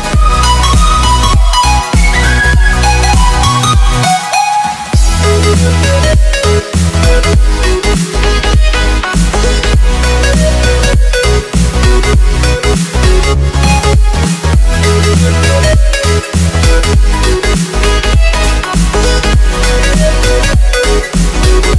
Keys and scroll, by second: 1.3 z, 4.3 z, 7.5 Escape, 8.2 v, 8.8 ctrl+0, 11.2 ctrl+t, 17.3 Return, 18.9 ctrl+t.